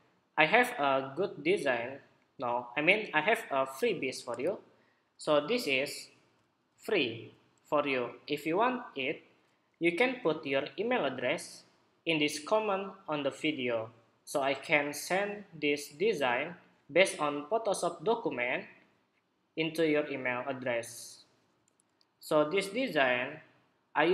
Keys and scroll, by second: 5.2 super+=, 6.4 super+=, 7.5 super+=.